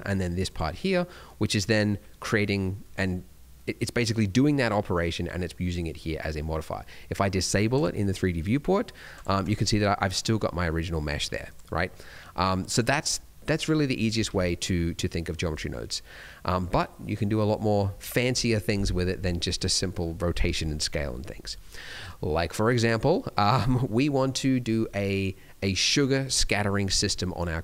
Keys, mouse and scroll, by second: 0.4 click, 7.7 click, 9.1 click, 9.4 click, 11.4 click, 12.7 click, 14.2 ctrl+x, 15.4 d, 15.7 right click, 16.5 d, 20.7 middle click, 20.9-21.2 scroll down 1, 21.2 middle click.